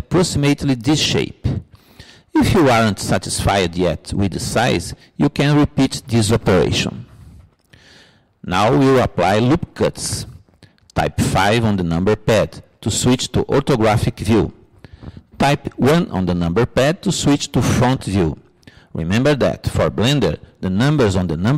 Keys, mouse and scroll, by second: 18.1 middle click, 18.5-19.5 middle drag, 19.6 middle click.